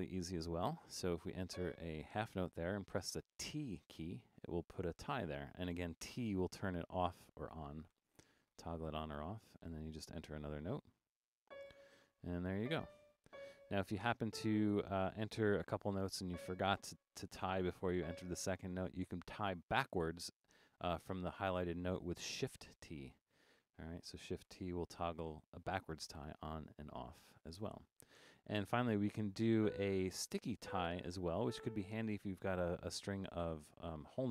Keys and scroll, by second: 3.4 typing, 6.2 t, 7.3-8.5 typing, 9.6 typing, 15.5 6, 17.4 4, 22.6 shift+t, 24.5 t, 25.8 typing.